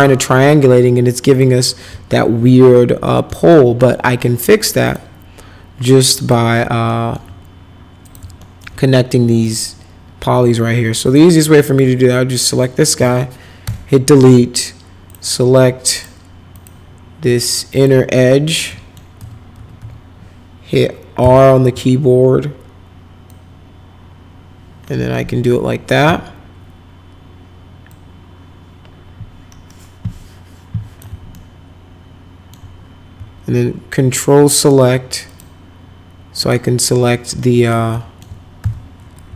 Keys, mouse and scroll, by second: 1.2 click, 3.2 alt+middle click, 4.8 click, 6.2 click, 6.9 alt+right click, 8.0 click, 8.4 alt+middle click, 9.4 click, 11.0 click, 11.6 click, 13.6 Delete, 15.0 click, 15.9 click, 16.5 click, 17.7 click, 18.6 middle click, 19.2 F3, 19.5 F3, 19.8 F4, 21.2 r, 23.2-25.9 shift+drag, 27.9-31.0 drag, 31.3-32.5 alt+middle drag, 34.1 ctrl+click, 35.2 click, 36.4 click, 37.4 alt+middle click, 37.9 alt+middle click, 38.6 F4.